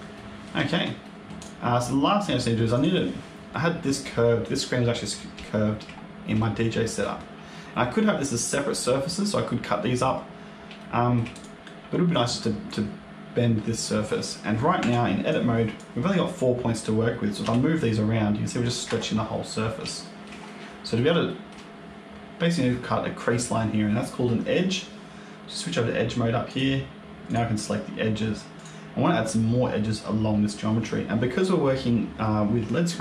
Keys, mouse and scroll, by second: 0.0 middle click, 0.6 shift+scroll down 1, 0.9 middle click, 1.3 click, 1.6-1.9 scroll down 3, 1.9 middle click, 2.6 click, 3.0 scroll up 1, 4.8 scroll up 1, 5.3 shift+middle click, 5.9-6.3 scroll up 2, 6.3 shift+middle click, 10.3 scroll up 2, 10.7 shift+middle click, 11.2 click, 14.7 Tab, 15.2 click, 17.3 g, 19.8 shift+middle click, 21.2 shift+middle click, 26.4 click, 27.2 click, 28.4 click.